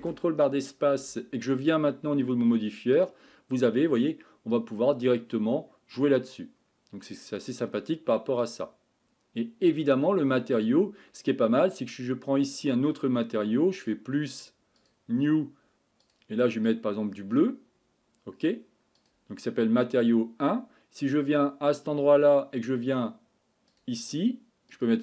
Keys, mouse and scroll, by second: 0.0 ctrl+space, 5.3-16.7 drag, 24.2-25.0 drag.